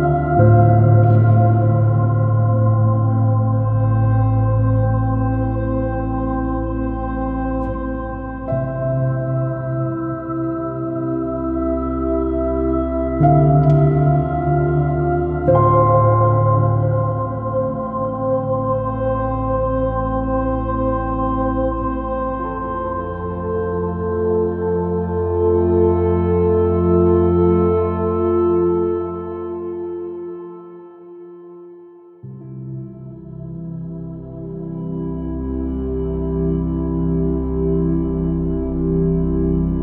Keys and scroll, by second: 2.3 super+v, 2.5 super+-, 7.0 super+-, 11.3 super++, 12.0 space, 17.7 alt+super+i, 18.0 space, 18.3 b, 23.6 x, 31.0 space, 32.3 space, 37.9 space.